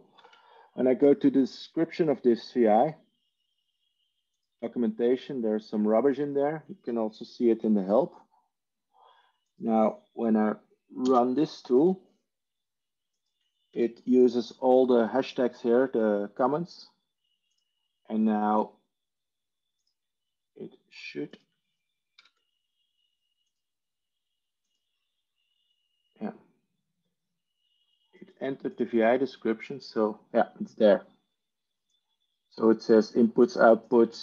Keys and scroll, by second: 0.0 ctrl+i, 7.9 ctrl+h, 10.9 ctrl+space, 11.5 ctrl+7, 13.7 ctrl+e, 23.6 ctrl+i.